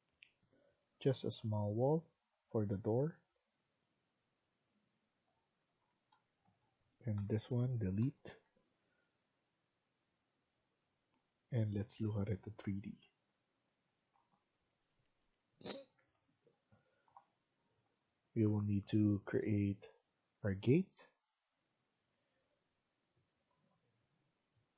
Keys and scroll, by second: 5.6 Escape, 5.8 Escape, 6.0 Escape, 7.1 Delete, 7.9 Escape, 8.1 Escape.